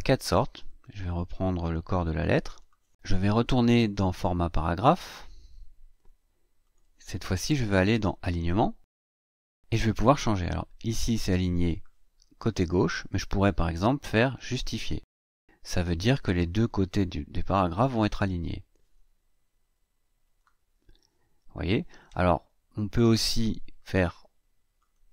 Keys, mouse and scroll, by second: 0.5-2.6 drag, 4.6 click, 6.4 click, 10.9-11.6 drag, 14.3 click, 15.1-15.8 drag, 20.0 click, 22.8 click, 24.6 click.